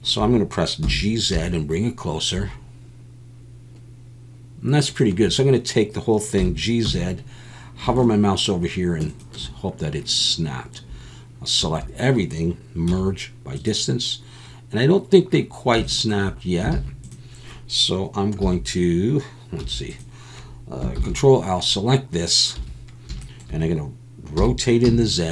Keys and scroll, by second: 0.8 g, 1.3 z, 6.4 g, 6.9 z, 11.6 a, 12.9 m, 16.7 alt+a, 18.4 e, 19.6 3, 21.0 ctrl+l, 22.6 1, 24.3 r, 24.8 z.